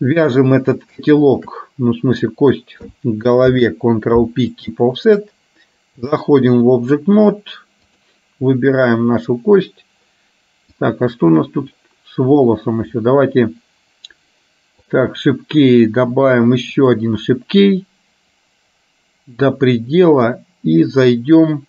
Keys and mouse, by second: 1.3 shift+click, 3.6 ctrl+p, 6.2 click, 7.9 click, 14.9 click, 16.9 click, 18.4-19.6 drag.